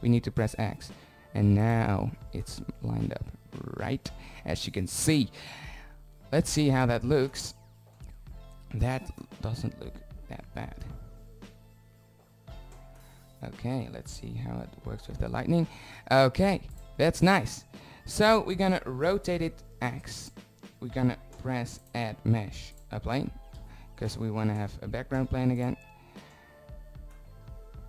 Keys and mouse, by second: 1.8 click, 5.0 shift+z, 10.3-13.8 middle drag, 13.8 z, 14.2 z, 15.7 z, 17.0-19.0 drag, 17.8 r, 22.2 s, 24.8 shift+z.